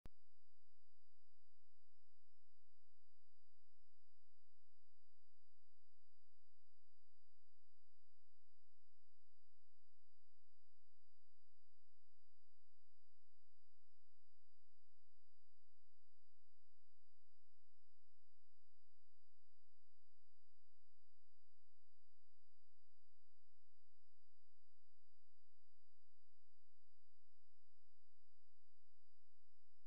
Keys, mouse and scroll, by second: 15.7 ctrl+p, 20.3 g, 27.4 click.